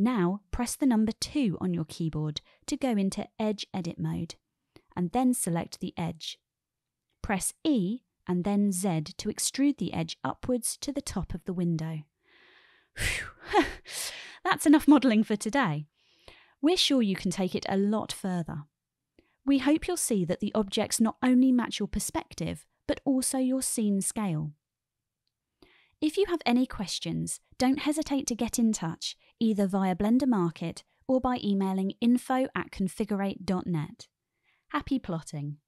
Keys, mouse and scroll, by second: 1.9 click, 4.0 2, 5.3 click, 6.6-7.2 shift+drag, 8.3 e, 9.1 z, 13.1 click, 14.2 Tab, 15.5-16.3 shift+middle drag, 16.3 shift+click.